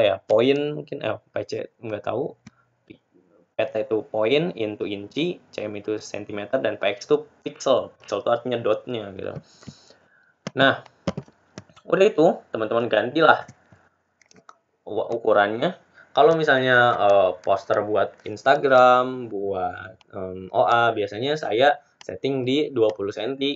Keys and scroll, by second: 17.3 ctrl+a.